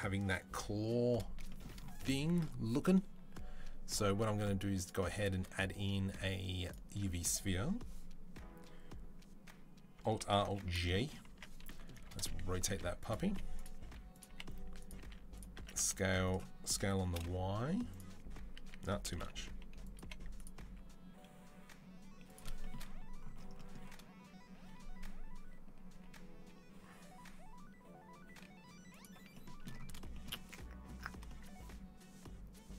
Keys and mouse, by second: 2.1 shift+a, 10.0 alt+r, 10.2 alt+g, 10.6-32.7 shift+middle drag, 11.1 Tab, 11.5-15.4 typing, 18.4 s, 19.8 g, 20.4 s, 25.8 g.